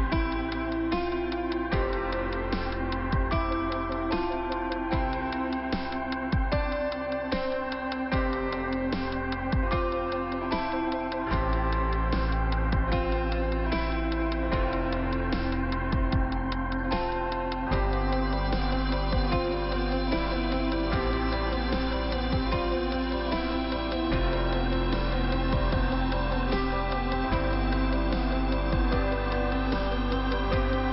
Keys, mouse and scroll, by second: 3.1 click, 3.2 click, 3.8 click, 3.9 click, 4.3 click, 6.8 click, 10.4 click, 10.4 click, 11.0 click, 12.6 scroll down 1, 12.9 click, 13.0 click, 13.5-14.0 scroll down 1, 14.0-14.8 scroll up 1, 14.8 click, 15.0 click, 15.4 middle click, 16.4 click, 16.4 click, 16.6 click, 16.8 double click, 18.9 scroll down 2, 19.9 middle click, 23.1 middle click, 24.2 middle click, 26.5-27.6 scroll up 1, 27.6 scroll up 1, 28.5 click, 28.6 click, 29.4 click, 30.3 middle click.